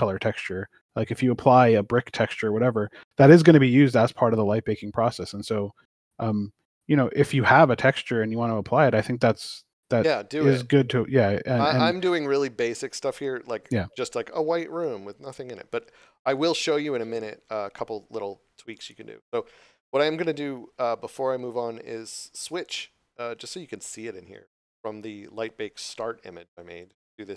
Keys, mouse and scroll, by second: 1.5 scroll up 1, 2.0 scroll down 1, 5.0 click, 7.4 click, 8.5 scroll up 1, 26.8 click.